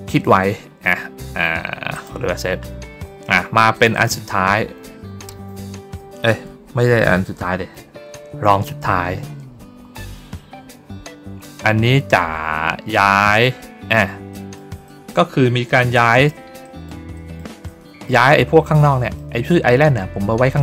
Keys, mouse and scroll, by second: 1.8 click, 3.6 click, 3.8 click, 12.8 ctrl+middle click, 14.2 middle click, 14.8 middle click, 15.8 middle click, 16.5 middle click, 17.0 middle click, 17.6 middle click, 18.7 middle click.